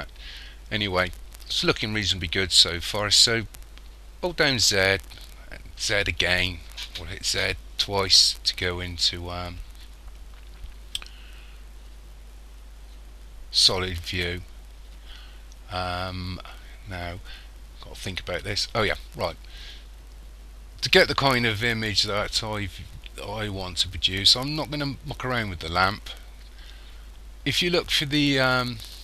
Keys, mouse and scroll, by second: 4.6 z, 5.8 z.